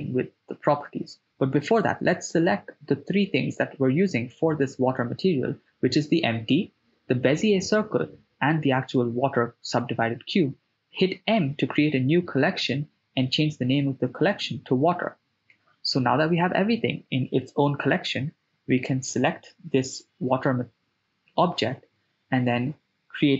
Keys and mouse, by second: 0.2-1.0 middle drag, 2.0 shift+right click, 4.4-5.5 middle drag, 6.4 shift+right click, 7.0-8.0 middle drag, 9.5 m, 15.2 KP_0, 17.1-17.9 drag, 17.1 right click, 20.5-23.0 drag.